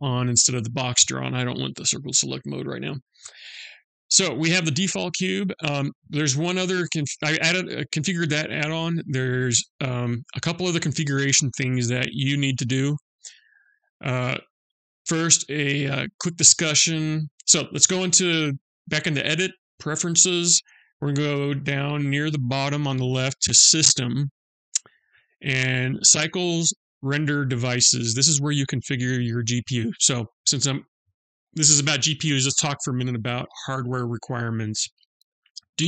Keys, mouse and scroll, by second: 14.1 click.